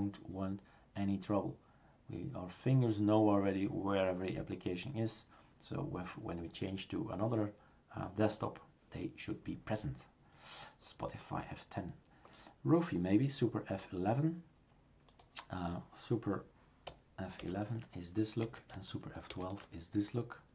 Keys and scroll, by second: 17.4 super+F11, 18.4 Escape.